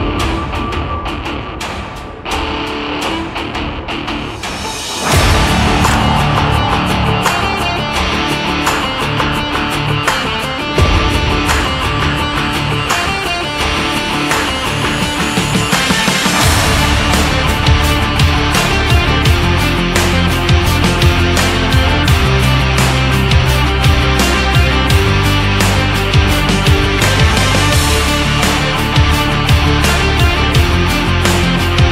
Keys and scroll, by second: 4.9 ctrl+s, 31.6 ctrl+z.